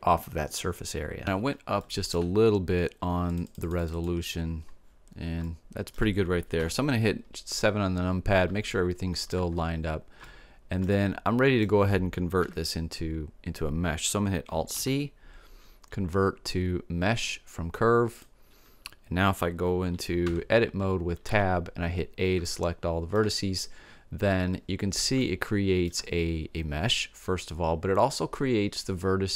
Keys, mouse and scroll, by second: 1.3-3.8 middle drag, 3.8-5.1 drag, 5.1-6.6 middle drag, 6.6 KP_7, 10.8-13.2 middle drag, 12.5 KP_7, 14.8 alt+c, 20.3 Tab, 21.4 a, 22.5 middle click, 24.1 middle click, 25.3-28.2 middle drag.